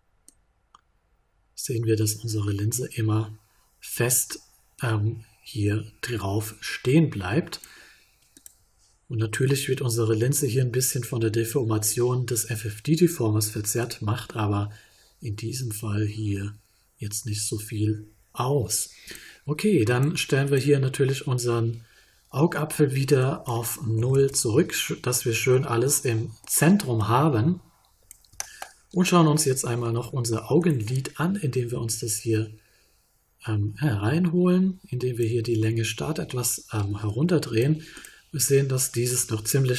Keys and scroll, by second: 23.9 0, 24.1 Return.